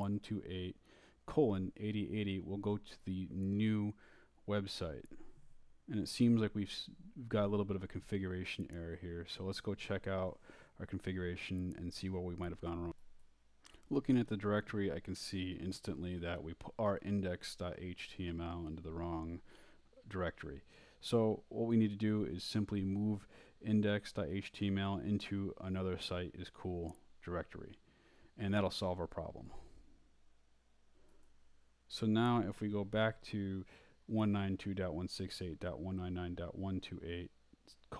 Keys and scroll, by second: 0.0-1.3 typing, 8.1-10.2 typing, 14.9-16.6 typing, 19.5-23.5 typing, 25.3-26.4 typing, 26.5 Return, 27.7-28.6 typing, 29.7 Up, 34.4 Return.